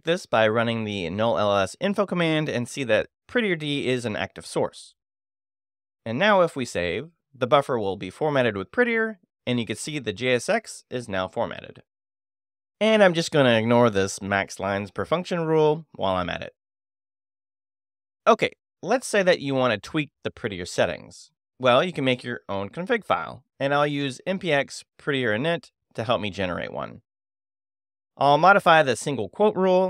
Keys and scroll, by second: 1.1 shift+n, 1.3 shift+u, 1.4 shift+|, 1.6 Tab, 2.6 Return, 5.5 q, 8.2 Escape, 8.7 shift+;, 8.9 shift+w, 9.3 Return, 13.5 |, 13.6 2, 13.8 j, 15.2 space, 15.3 c, 15.4 a, 17.1 7, 17.3 Return, 23.2 space, 23.4 f, 23.6 t, 25.2 super+v, 26.7 Return, 29.3 Return.